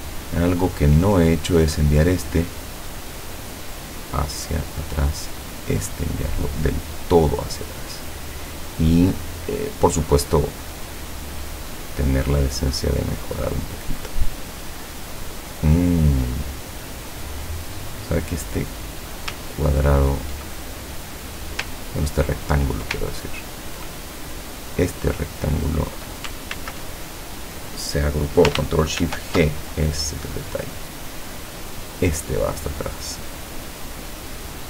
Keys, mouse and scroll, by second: 0.2-0.8 ctrl+scroll up 4, 1.7 click, 2.4 click, 3.8 click, 5.6 click, 6.5 click, 11.9 click, 13.1 click, 16.2 click, 17.2 click, 18.4-19.2 scroll up 1, 19.5-20.1 ctrl+scroll down 4, 20.6-21.2 ctrl+scroll up 3, 21.3-21.7 scroll down 2, 22.2-22.6 ctrl+scroll up 2, 23.2-23.9 ctrl+drag, 24.1 ctrl+click, 24.5 click, 25.4-26.2 drag, 26.6 ctrl+z, 29.1 ctrl+shift+g, 29.7 ctrl+shift+click, 30.5 click, 32.0 click.